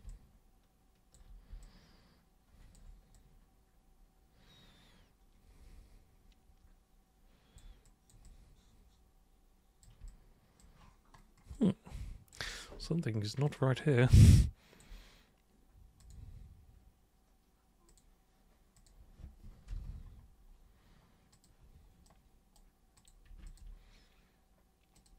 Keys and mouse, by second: 0.1-1.1 alt+super+drag, 1.6-2.7 alt+super+drag, 3.1-7.5 super+drag, 7.8 super+click, 8.2-9.8 super+drag, 10.0 alt+click, 11.5 alt+click, 13.4 click, 14.2 alt+click, 16.0 click, 17.9 super+click, 18.7 super+click, 19.7 super+Return, 21.3 super+click, 22.0 super+right click, 22.9 super+click, 23.4 ctrl+shift+click, 25.0 click.